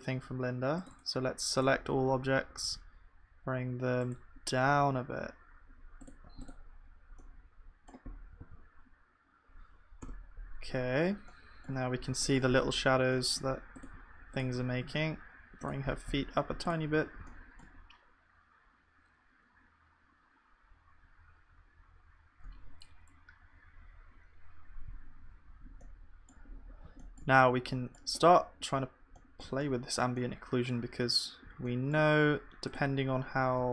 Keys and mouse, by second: 4.7 g, 8.4 ctrl+s, 10.0 KP_0, 16.9 ctrl+s, 16.9-20.2 drag, 16.9 g, 18.6-33.7 middle drag, 18.6-20.2 right drag.